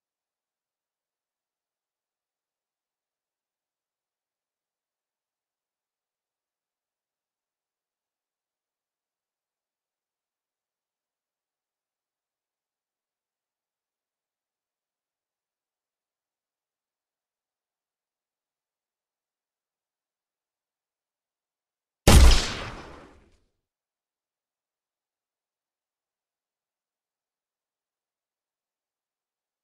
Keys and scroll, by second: 18.9 w, 24.5 s, 27.0 Escape.